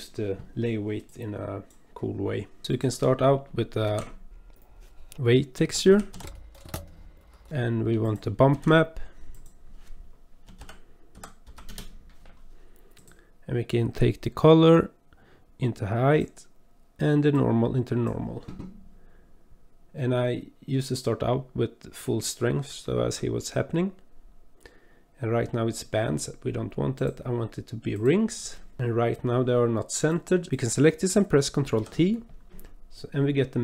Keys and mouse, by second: 1.1 click, 3.9 shift+a, 7.3 middle click, 8.0 click, 8.5 shift+a, 14.7 click, 15.6-16.2 drag, 17.3-18.1 drag, 27.0-28.1 drag, 30.1 click, 30.6 click, 31.8 ctrl+t.